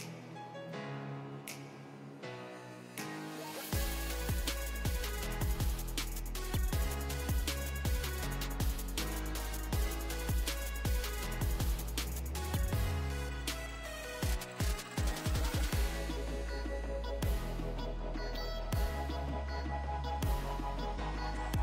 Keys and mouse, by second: 0.4 ctrl+a, 1.5 z, 4.8-13.6 right drag, 10.3-12.4 drag, 10.3-12.0 middle drag, 13.6 click, 13.7 middle click, 14.0 Tab, 14.2 z, 14.7 a, 16.2 z, 16.3 Tab, 18.5 ctrl+alt+shift+click, 20.4 Tab.